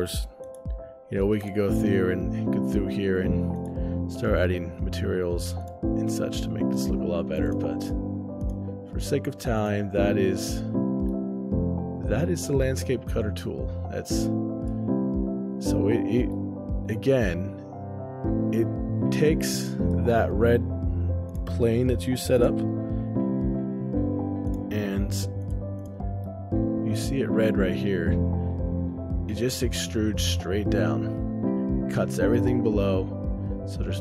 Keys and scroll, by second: 10.8 shift+space, 21.0 o, 22.2-23.0 typing, 26.1 shift+space, 29.9 ctrl+alt+o, 30.3 shift+space.